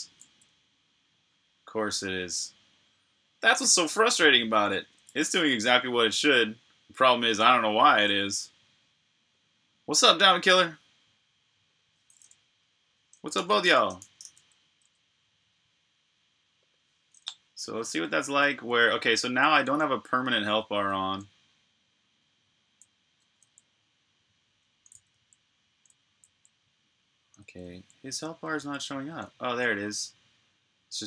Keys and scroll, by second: 5.0 super+r, 5.0-6.6 typing, 12.9-14.7 typing, 16.4 typing, 17.6-19.9 typing, 22.2 typing, 24.4-26.2 typing, 27.2-29.3 typing, 30.5-31.0 typing.